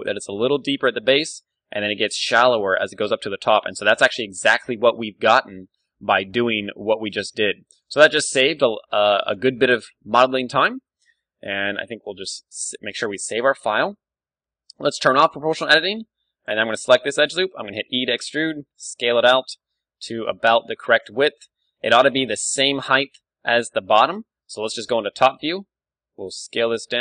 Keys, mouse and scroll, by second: 0.1-2.9 drag, 0.1-1.4 d, 2.5 d, 2.6 d, 2.9 d, 3.2-4.5 right drag, 4.2 d, 4.7-7.4 middle drag, 6.3 Tab, 6.8 z, 7.1 b, 8.0 z, 8.3 g, 9.3 click, 9.4 Tab, 9.6 middle click, 10.0-11.0 drag, 11.3-12.6 middle drag, 11.7 ctrl+w, 14.2 Tab, 15.1 o, 15.8 a, 16.5 click, 16.9-18.9 middle drag, 17.7 e, 19.4-21.0 drag, 21.2-22.5 middle drag, 22.4 ctrl+d, 22.5-24.1 drag, 24.0 ctrl+d, 24.5 KP_7, 25.6-27.0 middle drag, 25.6 s.